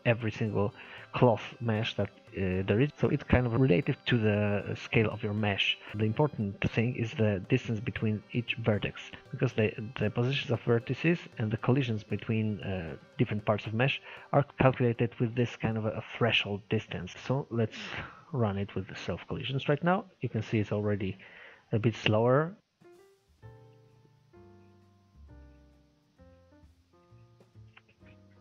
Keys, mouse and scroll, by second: 3.6-4.0 scroll down 1, 4.0-6.3 scroll up 5, 6.5 Tab, 17.1 click.